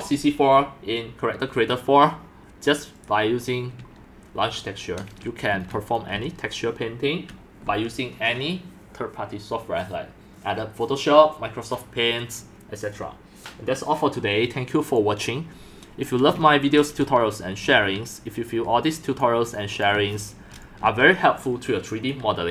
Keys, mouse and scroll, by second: 2.9 right click, 5.0-6.2 drag, 5.2-7.5 typing, 6.2 click, 6.7-7.0 drag, 16.1 click, 16.3 shift+middle click, 16.7 shift+middle click, 17.6-22.5 typing, 19.3 click, 20.3 shift+click.